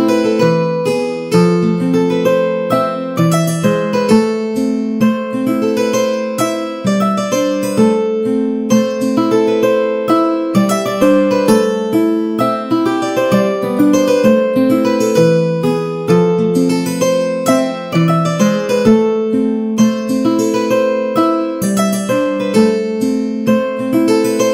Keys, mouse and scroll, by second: 0.3 shift+middle click, 0.7 Tab, 1.1 a, 1.9 ctrl+r, 3.5 Tab, 5.7 shift+middle click, 7.1-9.5 drag, 10.5 click, 11.6 a, 11.8 middle click, 13.1 Tab, 13.5 a, 13.7 a, 14.0 ctrl+r, 17.1 middle click, 18.8-21.0 middle drag.